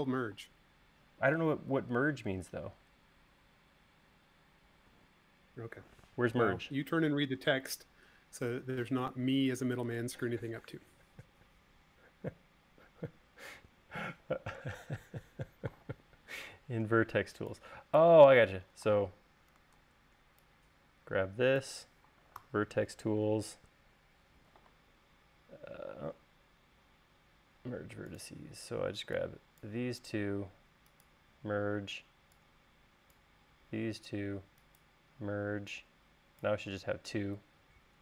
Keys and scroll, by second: 0.8 space, 20.3 super+z, 22.9 v.